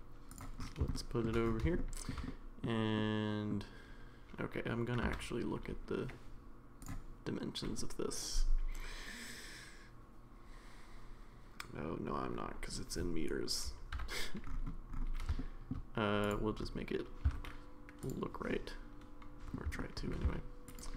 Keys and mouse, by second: 0.9 shift+middle click, 1.8-2.1 middle drag, 2.3-2.6 middle drag, 3.0 middle click, 5.0 n, 6.8 click, 13.9 n, 15.4-15.7 middle drag, 16.3-17.0 drag, 17.2 s, 18.5-19.5 middle drag, 19.8 middle drag.